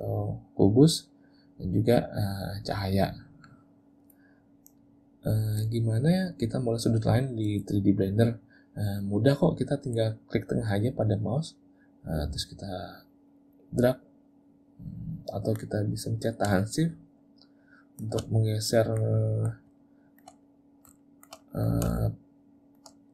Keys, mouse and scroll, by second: 2.7 click, 11.3 middle click, 16.7 shift+middle click, 18.4 middle click, 19.2 middle click, 19.8 shift+middle click, 20.5 middle click, 21.0 shift+middle click, 21.4 middle click, 22.0 shift+middle click.